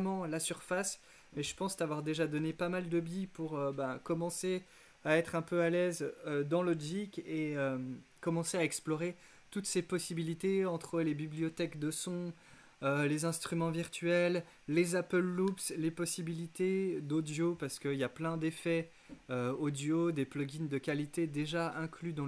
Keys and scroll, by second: 0.7 x, 2.5 z.